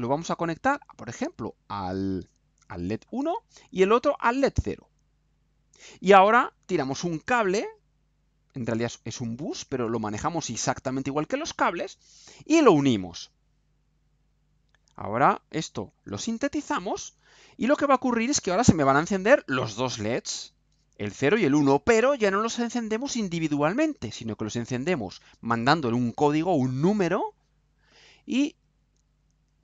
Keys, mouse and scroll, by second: 0.6-1.1 scroll down 4, 1.7 scroll up 2, 3.0 click, 4.0 click, 5.3 click, 10.0-12.1 drag, 13.9 click, 15.1 click, 15.9 ctrl+u.